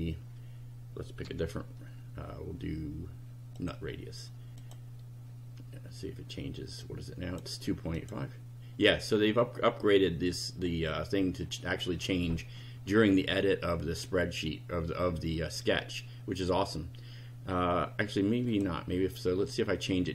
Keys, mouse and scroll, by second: 1.2 3, 3.6 click, 4.6 click, 6.8-7.6 drag, 8.0 click, 18.5 click.